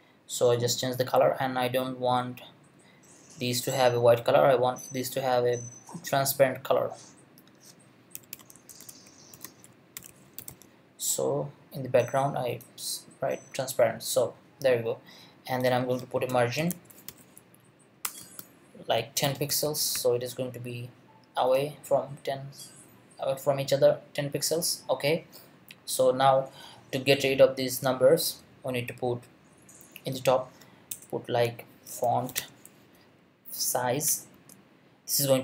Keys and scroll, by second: 7.9-11.0 typing, 16.3 Return, 16.3-20.4 typing, 18.0 Return, 30.9 Return, 31.6-32.9 typing, 34.1 Return, 34.3 space.